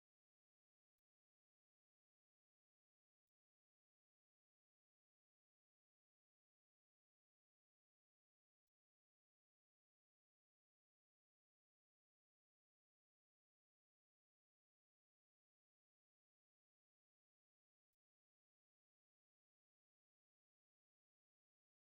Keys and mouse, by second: 0.2 click, 1.9 n, 2.4 middle click, 2.8 middle click, 4.4 shift+middle click, 4.8 a, 5.3 shift+middle click, 5.7 ctrl+middle click, 6.9 click, 7.3 shift+middle click, 8.5 middle click, 9.1 right click, 10.2 space, 11.9 o, 15.1 click, 15.9 middle click, 18.1 click, 20.5 click.